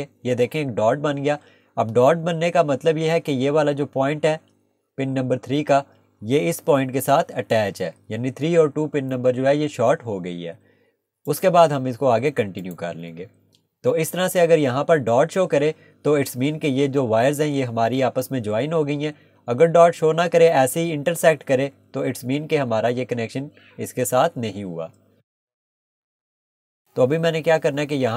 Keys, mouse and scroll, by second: 11.3 click, 13.2 Escape, 26.6 click.